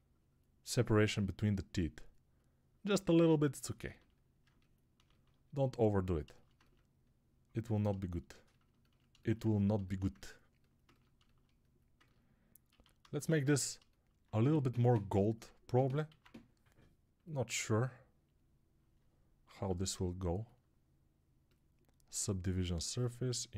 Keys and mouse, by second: 12.6 alt+q, 16.0 alt+q, 19.4 alt+q.